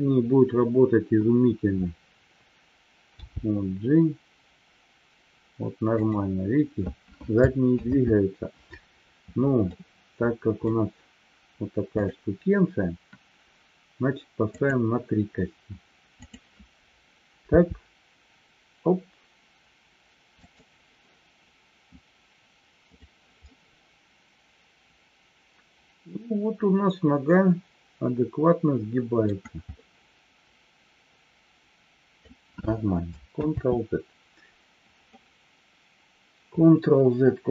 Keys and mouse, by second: 8.1 ctrl+z, 9.8-10.6 middle drag, 12.0 click, 14.5-15.1 drag, 22.9 click, 23.4-29.1 middle drag, 29.8-32.2 middle drag, 33.8 ctrl+z.